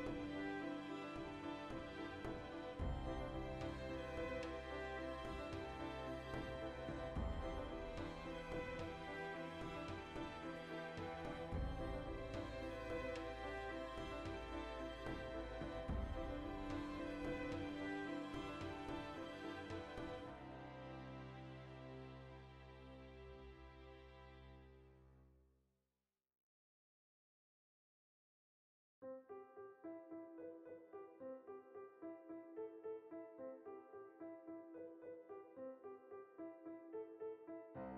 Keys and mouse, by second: 0.1 ctrl+shift+z, 0.4-1.7 middle drag, 1.4 e, 1.7 click, 4.8 ctrl+right click, 5.2 shift+middle click, 5.7 ctrl+right click, 6.3 ctrl+KP_Add, 6.8-8.0 alt+shift+right drag, 8.0 ctrl+KP_Add, 8.8-10.6 alt+shift+right drag, 10.6 g, 11.7-15.9 ctrl+middle drag, 14.0 Tab, 14.4 alt+q, 14.9 Tab, 15.8 1, 15.9 right click, 16.7 b, 17.0-18.3 shift+drag, 18.5 click, 19.1 ctrl+z, 19.7 shift+click, 20.7 shift+middle click, 21.2 click, 21.9 shift+click, 23.4 middle click, 24.6 click, 25.7 middle click, 26.1 shift+click, 26.7 Tab, 26.7 click, 26.9-28.7 shift+middle drag, 28.4 3, 28.7 alt+right click, 28.9-33.1 middle drag, 29.3 ctrl+KP_Add, 32.8 shift+d, 33.1 right click, 33.3-34.5 middle drag, 34.5 e, 35.2 click, 35.6 i, 36.0 click, 36.2 i, 36.5 click, 36.6 middle click, 36.9 e, 37.1 click, 37.2 e, 37.6 click, 37.6-37.9 middle drag.